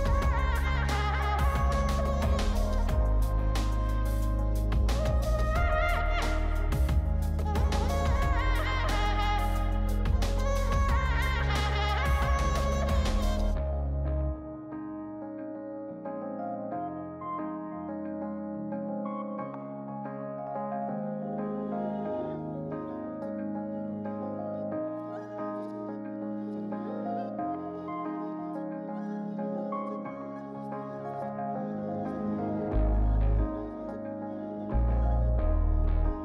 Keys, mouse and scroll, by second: 1.2 double click, 3.2-4.8 scroll up 1, 4.8-7.2 scroll down 2, 13.4 double click, 21.0 scroll up 4, 22.3-24.2 scroll down 5, 27.6 double click, 29.2-29.6 scroll up 3, 29.9-31.1 scroll down 2, 31.1 scroll up 2, 31.5-32.2 scroll down 2, 32.2 scroll up 2, 33.1 scroll down 2, 33.7-34.4 scroll up 3, 34.4 scroll down 4.